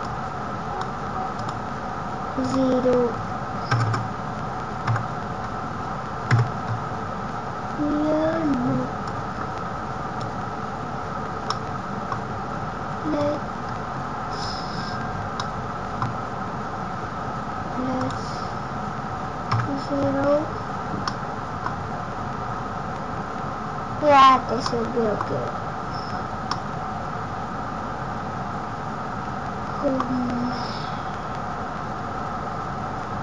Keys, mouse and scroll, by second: 3.8 BackSpace, 6.9 scroll up 1, 8.9 click, 11.4 middle click, 13.1 click, 15.3 middle click, 17.9 click, 19.4 KP_0, 20.9 middle click, 21.9-22.8 scroll down 1, 24.6 middle click, 25.8-26.4 scroll down 1, 26.4 middle click.